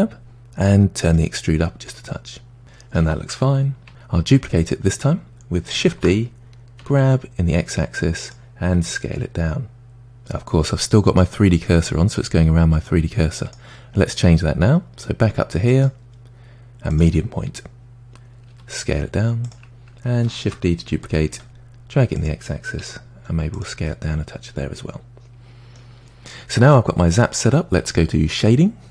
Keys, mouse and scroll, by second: 1.2-2.6 drag, 2.6-3.9 middle drag, 3.9 Tab, 5.9 shift+d, 8.8 s, 15.7-18.5 drag, 18.5 s, 20.4 shift+d, 22.8 s, 23.9-26.9 middle drag.